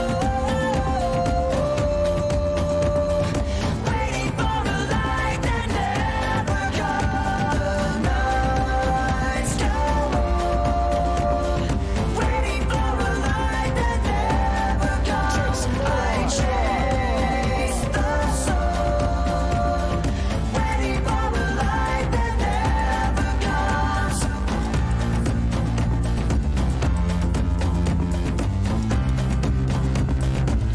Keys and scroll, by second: 0.0-1.7 typing, 3.6-5.7 typing, 7.8-10.5 typing, 23.8-26.0 typing.